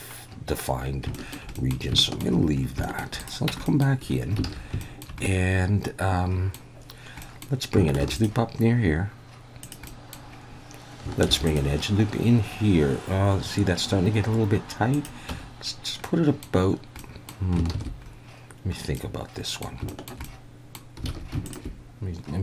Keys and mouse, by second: 1.1 shift+middle drag, 1.5 middle click, 2.0 shift+middle drag, 2.8 shift+middle click, 3.5 Tab, 3.6 middle click, 4.4 alt+a, 4.8 shift+middle click, 5.2-6.5 middle drag, 7.2 middle drag, 8.0 ctrl+r, 9.6 click, 10.0 middle click, 11.3 ctrl+r, 14.9 click, 15.3 Tab, 16.0-16.4 middle drag, 17.0-17.3 middle drag, 17.8 ctrl+z, 18.0 ctrl+x, 19.1-19.7 drag, 20.0 shift+click, 20.3-20.8 drag, 21.1 alt+a, 21.5 alt+shift+click.